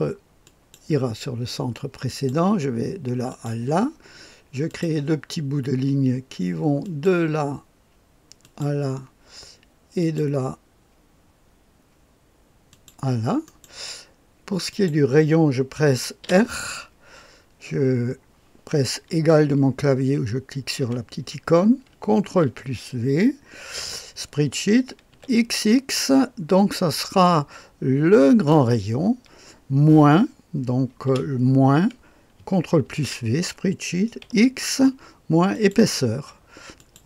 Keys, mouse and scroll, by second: 0.4 click, 2.0 click, 3.2 click, 4.6 click, 6.7 click, 8.3 click, 9.9 click, 12.6 click, 13.4 middle click, 14.6 click, 16.2 r, 20.7 Menu, 20.9 =, 22.2 ctrl+v, 25.0 x, 28.2-31.0 drag, 31.0 typing, 32.8 ctrl+v, 34.1 x, 35.4 click, 36.7 click.